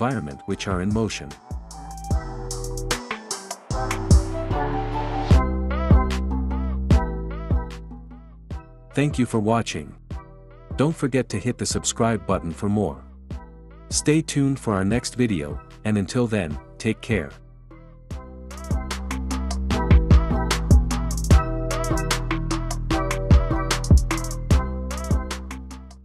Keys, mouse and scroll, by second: 4.6-5.6 drag.